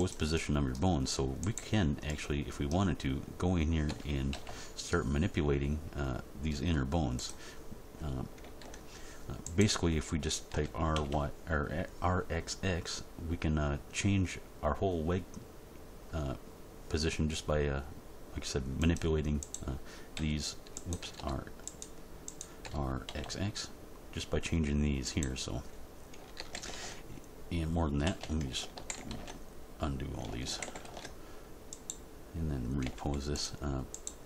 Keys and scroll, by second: 3.9 r, 4.3 x, 8.6 alt+r, 10.5 r, 10.9 x, 20.1 e, 21.0 r, 22.6 r, 23.1 x, 26.3 alt+r, 26.5 alt+g, 26.7 alt+s, 28.0 a, 28.7 alt+r, 29.1 alt+s, 30.4 alt+r, 30.7 alt+g, 30.9 alt+s, 32.8 g.